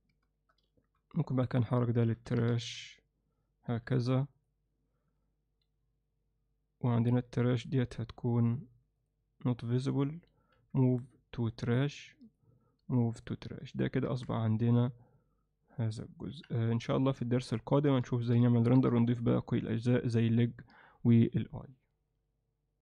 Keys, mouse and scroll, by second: 1.0 m, 14.4-15.9 alt+middle drag, 16.3 KP_1, 16.9 z, 17.7 ctrl+alt+middle click, 18.7 ctrl+middle click, 19.0 alt+shift+middle click.